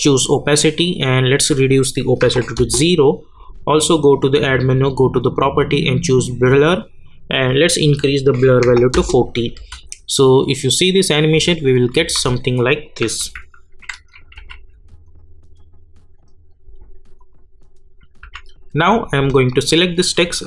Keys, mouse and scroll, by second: 0.1 click, 2.5 Return, 3.9 click, 6.2 click, 8.9 Return, 9.5 space, 12.7 click, 13.2 u, 14.3 k, 15.0 click, 18.2 u, 19.3 click.